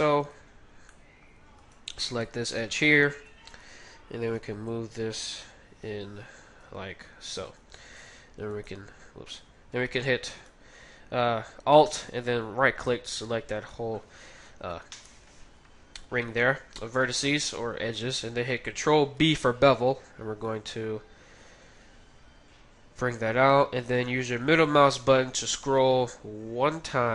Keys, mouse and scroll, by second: 0.2 g, 0.9 middle click, 1.6-4.2 middle drag, 1.6-3.5 right drag, 3.1 KP_3, 4.4 g, 6.9-10.3 middle drag, 8.4 x, 10.3-12.8 right drag, 12.9-15.6 middle drag, 14.7 KP_3, 19.1 ctrl+b.